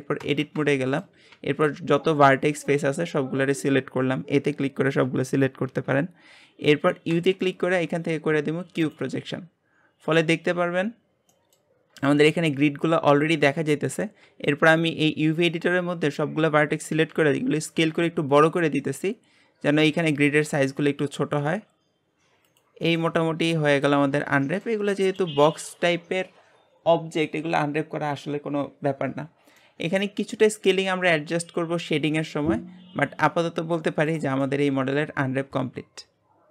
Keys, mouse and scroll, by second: 0.2 Tab, 0.7 shift+middle click, 1.3 a, 9.0 u, 11.3 middle click, 11.7 scroll up 1, 12.1 shift+middle click, 12.8 scroll up 1, 13.9 a, 17.0 s, 20.7 scroll down 1, 21.5 s, 23.0-24.1 middle drag, 24.1 Tab, 24.4-34.2 middle drag, 34.2 click, 34.5-36.5 shift+middle drag.